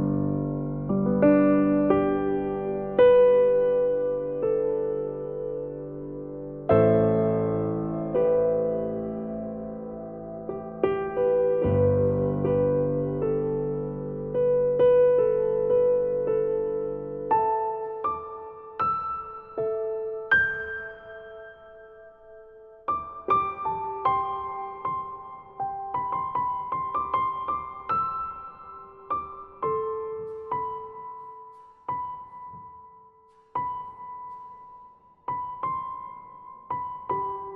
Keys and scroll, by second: 3.3 ctrl+=, 24.7 ctrl+0.